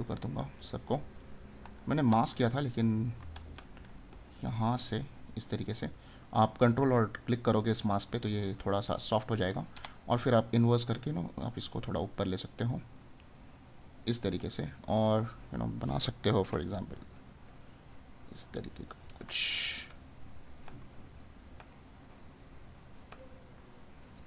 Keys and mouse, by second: 1.7 right click, 3.5 right click, 14.6 right click, 18.4 right click, 21.7 right click.